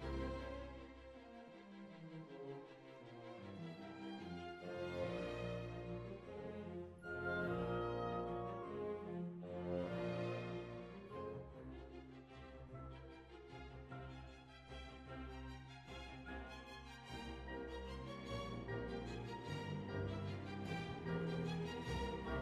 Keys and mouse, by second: 0.8-2.6 middle drag, 2.6 click, 4.0 z, 4.5-5.6 middle drag, 6.2-7.8 drag, 6.6-7.8 right drag, 7.8 KP_7, 8.4 click, 9.1 z, 10.7 right click, 12.0 b, 12.6 click, 13.4-14.9 right drag, 15.1 click, 16.2 click, 16.6 middle click, 17.5 click, 19.8-21.9 drag, 21.9-22.4 middle drag.